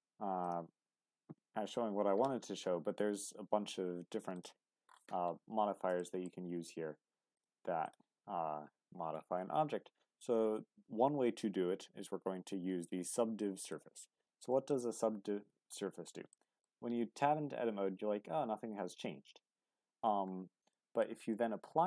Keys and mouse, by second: 0.4-5.9 drag, 6.0 shift+middle drag, 7.3 click, 7.9-14.7 drag, 14.7-15.7 middle drag, 16.3 middle click, 17.4 Tab, 20.7 middle click.